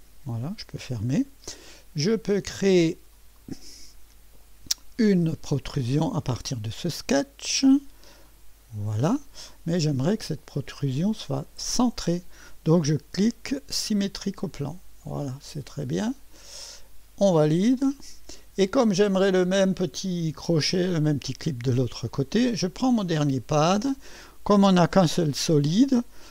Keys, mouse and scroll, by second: 1.7-3.4 drag, 4.1-7.1 scroll up 2, 8.2 click, 9.5-10.7 drag, 13.8 click, 15.0-16.8 drag, 17.8 click, 23.1 click, 23.5-24.0 drag.